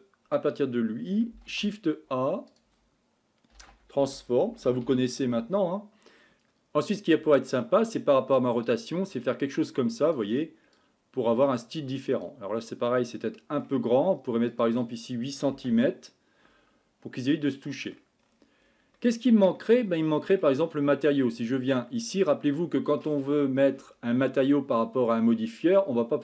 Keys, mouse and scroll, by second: 6.3 ctrl+z, 8.6-24.3 drag.